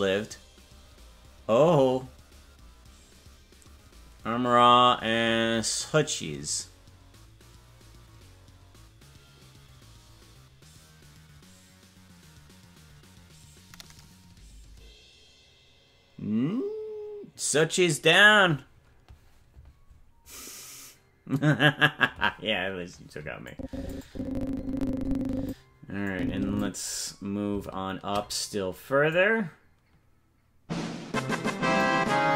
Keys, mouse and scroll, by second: 23.5 click, 24.0-25.5 drag, 26.1 click, 26.8-27.5 scroll down 3, 27.5-28.1 scroll down 1, 29.1-31.8 drag.